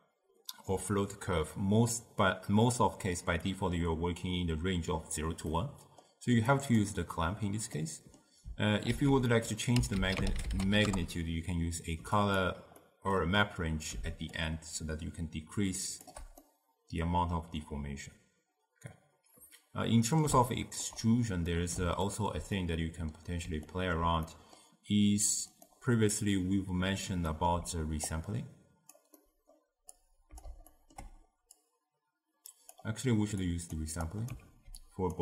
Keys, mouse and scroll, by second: 5.6-6.6 middle drag, 6.6 click, 7.8-8.9 middle drag, 8.9 ctrl+a, 12.9-14.4 middle drag, 14.4-16.5 shift+drag, 16.5-19.5 middle drag, 20.6-28.2 ctrl+middle drag, 28.2 click, 29.3-30.0 middle drag, 30.0 click, 30.8-31.7 ctrl+middle drag, 31.7-34.5 drag, 34.5 ctrl+x, 34.9 click.